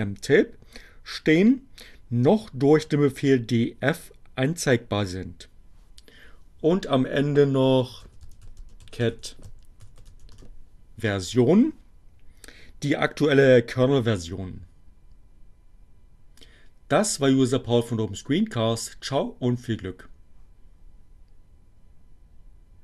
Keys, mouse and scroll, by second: 7.5-10.1 typing, 10.3 Return.